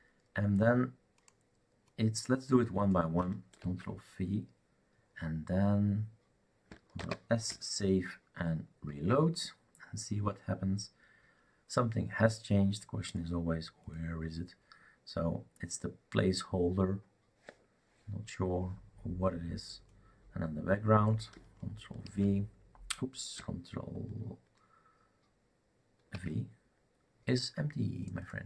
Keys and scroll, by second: 3.6 ctrl+v, 7.0 ctrl+s, 9.0 shift+r, 22.0 ctrl+v, 26.1 ctrl+v.